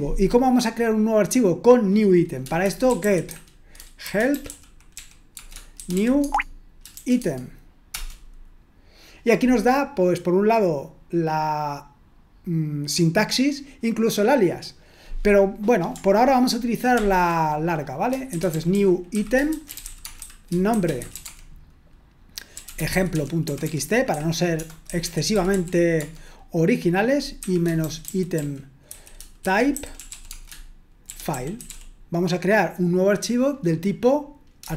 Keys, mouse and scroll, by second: 2.8-6.9 typing, 7.2 Tab, 7.9 Return, 16.9 ctrl+l, 18.1-26.5 typing, 27.8-32.2 typing.